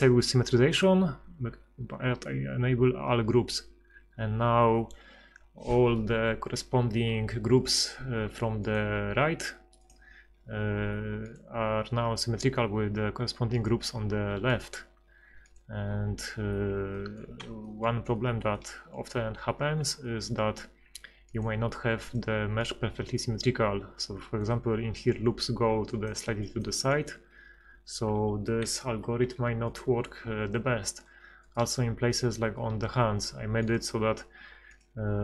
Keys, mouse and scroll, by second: 7.6 middle click, 8.7-9.8 right drag, 17.4 middle click, 17.8 middle click, 23.3 middle click, 25.7-26.9 d, 25.9 click, 26.7 click, 27.9 d, 28.0 d, 28.1 d, 28.6 Escape, 32.2 right click.